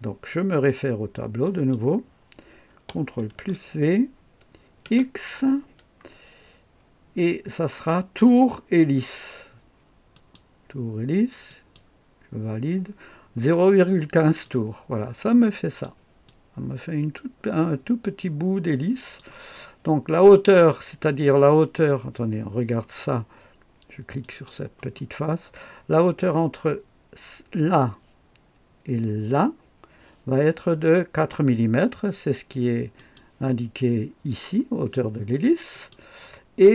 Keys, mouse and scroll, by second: 1.4 click, 3.3 ctrl+v, 4.8 x, 6.7-7.3 scroll down 1, 10.1 click, 11.4 click, 14.4-15.8 drag, 16.2-19.2 drag, 24.2 click, 25.2-32.9 scroll up 1, 32.9 click, 35.7 click.